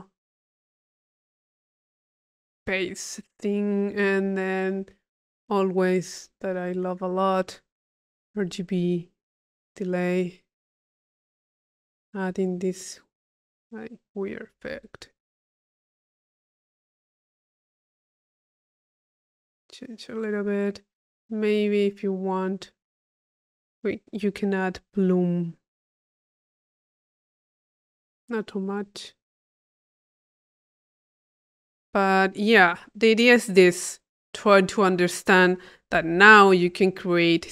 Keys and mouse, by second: 0.5-4.5 drag, 1.8 Delete, 2.9 middle click, 5.4 click, 6.3-7.5 middle drag, 7.5 click, 9.7-10.9 drag, 11.3 click, 12.7-13.7 drag, 14.1 click, 15.5 click, 18.2 click, 19.7 click, 21.0-22.1 drag, 22.2-23.2 drag, 23.2 click, 23.4 click, 26.0 click, 27.1 click, 28.9-31.4 drag, 31.8 click, 32.5 click, 33.3 click, 35.4 click, 36.0 p, 36.4 click.